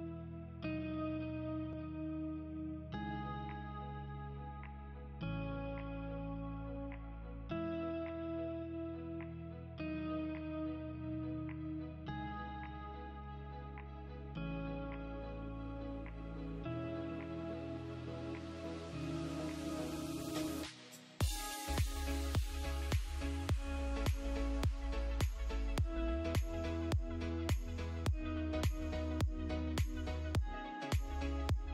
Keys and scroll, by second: 1.0 space, 7.2 ctrl+q, 13.0 ctrl+z, 17.8 space, 23.6 ctrl+z, 24.0 space, 24.8 Delete, 26.8 F2, 31.2 space.